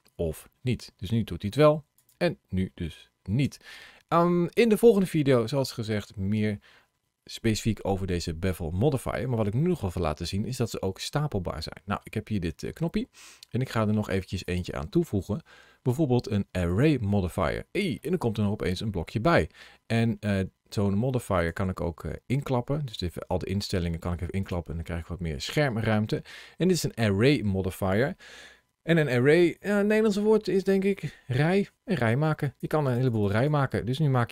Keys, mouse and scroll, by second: 1.8 click, 3.3 Tab, 8.3-8.9 scroll down 2, 8.9 middle click, 14.3 click, 17.8 middle click, 21.2 click, 22.7 click, 32.3 click, 32.7 click, 33.7 scroll down 2.